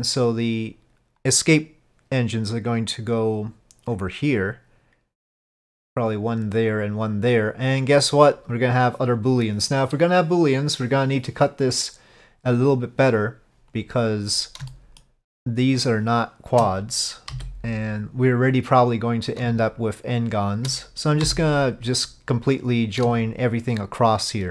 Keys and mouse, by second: 13.8 click, 14.8 shift+middle click, 19.1 click, 20.3 click, 22.7 click, 24.3 shift+click.